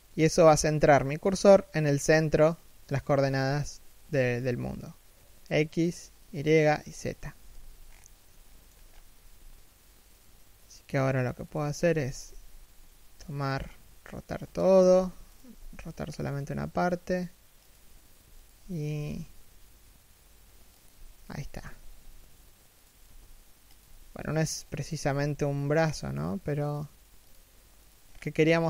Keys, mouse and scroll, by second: 2.1 middle click, 2.8 z, 3.8-4.5 scroll down 1, 6.9 1, 7.2 z, 7.4-8.0 scroll up 1, 8.0 shift+middle click, 8.5 scroll down 1, 8.8 r, 14.6 a, 15.0 alt+right click, 15.3 r, 18.1 alt+right click, 18.5 r, 21.4 g, 23.5 a, 23.8 right click, 24.8 g, 27.5 right click, 27.8-28.2 scroll up 1, 28.2 g.